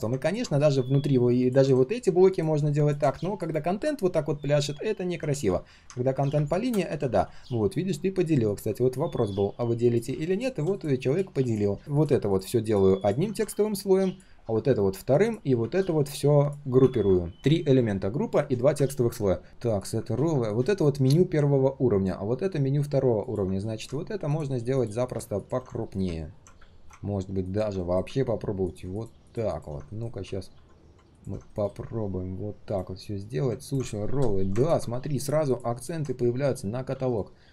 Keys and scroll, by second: 5.3 ctrl+z, 5.9 ctrl+z, 7.1 ctrl+z, 17.4 ctrl+z, 20.3 ctrl+shift+4, 23.6 ctrl+alt+c, 25.8 ctrl+alt+v, 27.8 ctrl+alt+c, 29.9 ctrl+alt+v, 30.5 ctrl+z, 31.5 ctrl+alt+v, 31.6 ctrl+alt+v, 31.7 ctrl+alt+v.